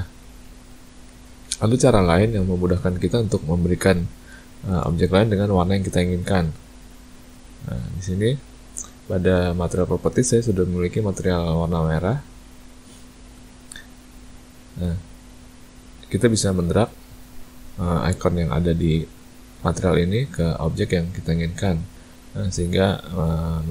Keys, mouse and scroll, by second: 1.1 ctrl+z, 1.5 ctrl+z, 1.8 ctrl+z, 2.7 a, 2.9 a, 4.5 shift+middle click, 4.9 middle click, 6.7 click, 7.3 a, 7.9 click, 8.3 a, 8.5 a, 12.8 click, 13.3 a, 13.5 a, 15.9 click, 20.0 click, 22.3 click.